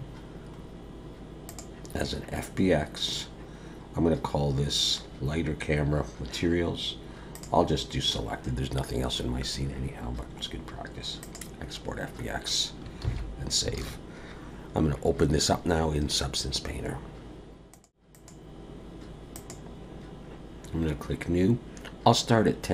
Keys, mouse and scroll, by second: 13.0 ctrl+s, 13.8 alt+a.